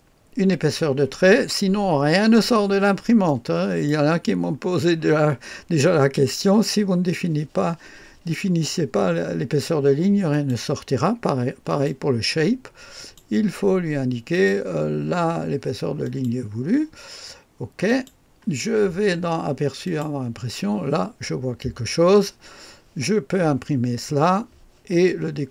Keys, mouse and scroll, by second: 3.2 click, 10.3 click, 11.7 click, 13.0 click, 14.3 click, 16.0 click, 17.9 click, 19.8 click, 20.4 click.